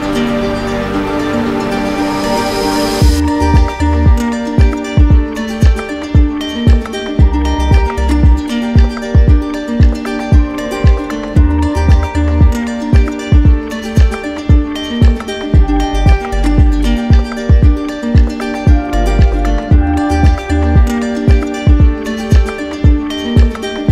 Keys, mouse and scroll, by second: 0.3 click, 1.1 click, 5.2 click, 6.0 click, 7.0 click, 8.0 click, 8.5 click, 8.9 shift+click, 9.7 alt+click, 11.7 click, 12.2 click, 12.7 click, 13.2 click, 13.7 click, 15.1 click, 16.6 ctrl+w, 18.2 click, 19.9 click, 20.5 click, 21.0 z, 22.5 click.